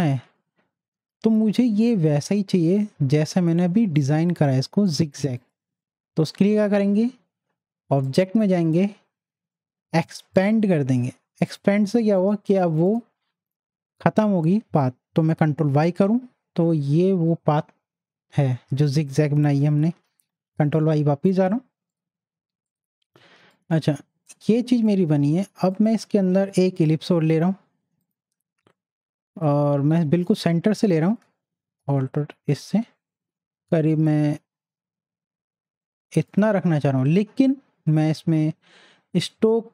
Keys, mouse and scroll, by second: 0.9 ctrl+y, 4.4 ctrl+y, 4.5 click, 8.0 click, 8.1 click, 10.4 click, 15.7 ctrl+y, 19.5 ctrl+y, 20.4 ctrl+y, 21.9 click, 23.2 z, 23.8 click, 25.2-27.6 drag, 30.3-39.0 drag.